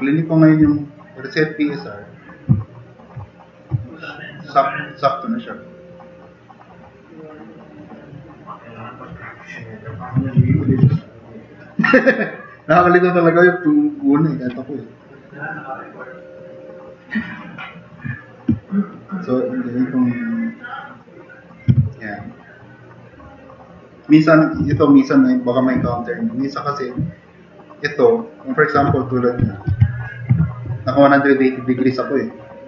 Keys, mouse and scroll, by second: 4.2-6.4 drag, 7.0-8.7 drag, 9.5 drag, 10.4 r, 15.6-21.5 drag, 15.6 r, 22.2-22.5 drag, 23.2 drag, 29.7 super+=.